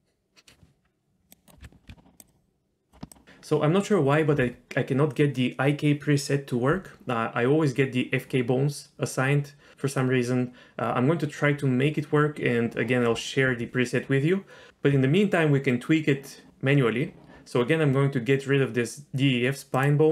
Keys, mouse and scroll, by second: 1.3 click, 1.6 ctrl+z, 2.2 ctrl+z, 2.2-2.9 drag, 19.7 click.